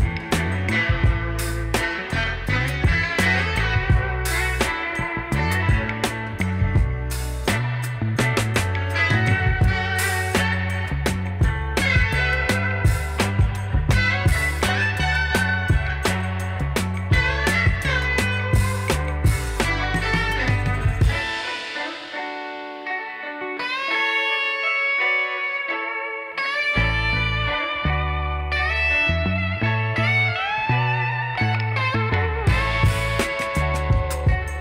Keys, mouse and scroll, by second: 11.2 alt+scroll up 1, 13.3-13.6 alt+scroll down 1, 14.7 double click, 15.1 alt+scroll up 1.